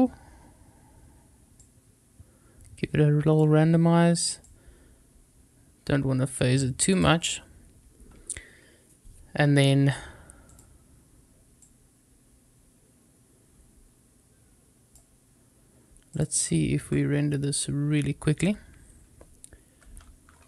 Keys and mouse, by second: 1.6-3.4 drag, 4.3-6.2 drag, 6.8 click, 10.4 click, 11.5-14.9 drag, 16.0 click, 16.8-18.4 drag.